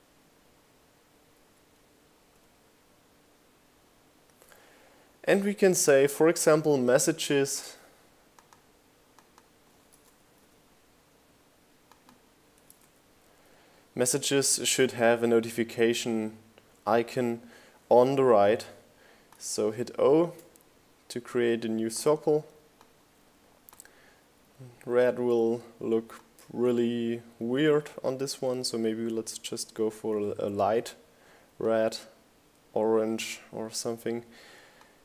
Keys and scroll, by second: 1.2 Right, 1.7 s, 3.9 Right, 4.1 s, 9.4 o, 29.5 t, 31.4 9.